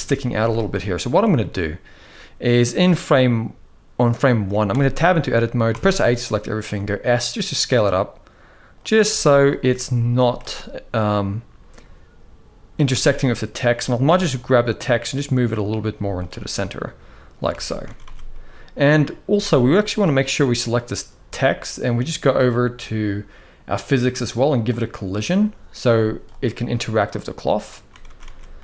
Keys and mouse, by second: 0.1 z, 1.1-2.3 shift+middle drag, 4.5 Tab, 5.5 a, 6.5 s, 8.8 z, 10.0 z, 12.7 Tab, 13.0 click, 14.0 g, 15.7 z, 16.5-17.1 middle drag, 17.3 alt+a, 17.6 ctrl+s, 17.8 ctrl+s, 18.1 middle click, 19.0 z, 20.3 click, 24.4 click, 25.7 z, 27.2-27.5 middle drag, 27.8 ctrl+s, 28.0 ctrl+s, 28.4-28.6 middle drag.